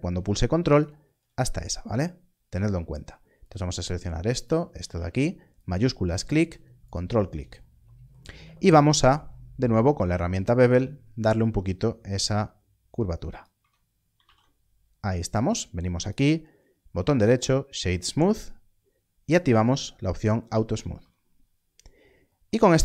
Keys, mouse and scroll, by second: 0.7 ctrl+click, 3.4 click, 4.4 ctrl+click, 5.5 shift+click, 6.8 ctrl+click, 8.9 ctrl+b, 13.3 click, 13.5 Tab, 14.2 alt+a, 14.6 scroll down 1, 16.0 right click, 19.7 click, 20.9 alt+a, 21.1 scroll down 1.